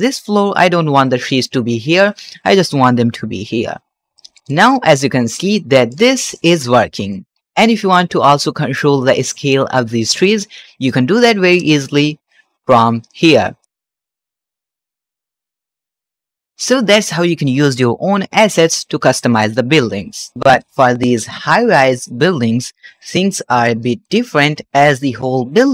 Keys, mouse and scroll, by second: 0.1 shift+middle click, 1.1-2.1 scroll up 1, 2.3 middle click, 3.4-4.5 scroll down 6, 4.1 middle click, 4.6 middle drag, 4.9 shift+middle drag, 5.4-5.8 middle drag, 6.0-6.4 shift+middle drag, 6.5 scroll down 1, 6.7 shift+middle click, 7.1-8.1 middle drag, 8.3 shift+middle click, 9.9 click, 11.4 click, 11.9-12.2 scroll down 2, 12.9-15.0 shift+drag, 15.4 shift+click, 20.3 shift+middle click, 20.3 scroll down 1, 20.8 scroll down 2, 21.0 middle click, 21.3 shift+middle click, 21.9 scroll up 1, 22.0 shift+click, 22.6 shift+middle click, 23.0-23.8 middle drag, 23.9-24.9 shift+middle drag, 25.6-25.7 shift+middle drag.